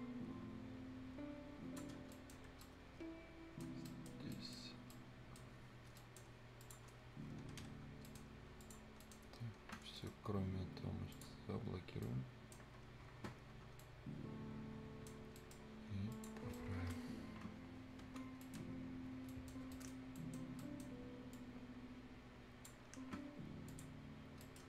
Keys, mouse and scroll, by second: 1.9 scroll down 1, 2.1 right click, 2.6 Escape, 2.6 right click, 3.7 scroll down 1, 3.9 right click, 4.7 scroll up 1, 4.9 right click, 5.5 scroll down 1, 5.9-6.5 scroll up 2, 6.0 right click, 6.6 click, 6.9 scroll down 1, 7.6 Escape, 7.7 scroll down 1, 7.8 scroll up 1, 8.0 right click, 8.6 click, 8.8 scroll up 1, 9.0 right click, 10.0 middle click, 11.1 click, 12.0-13.4 right drag, 13.4 scroll up 1, 13.8-15.1 right drag, 15.1 scroll down 1, 15.4 right click, 15.7 scroll up 1, 16.1 click, 16.4 scroll down 1, 16.5-18.0 right drag, 18.0 F10, 18.4 right click, 18.6-19.0 scroll down 1, 19.0 scroll up 1, 19.3 right click, 20.9 scroll up 1, 21.3-23.7 drag, 24.2-24.6 scroll down 2, 24.4 right click.